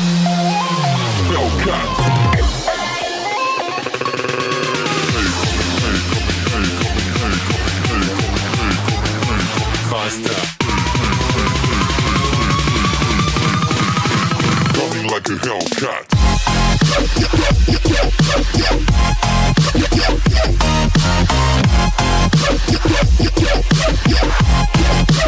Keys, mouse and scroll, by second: 4.4 r, 9.6 click, 11.4 click, 13.1 KP_1, 15.4 KP_1, 15.5 click, 18.8 KP_1, 19.9 KP_3, 20.0 KP_1, 24.3 click.